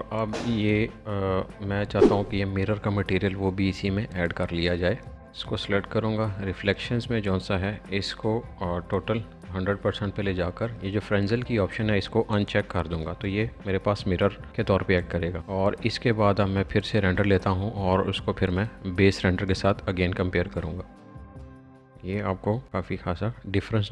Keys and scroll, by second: 0.7 b.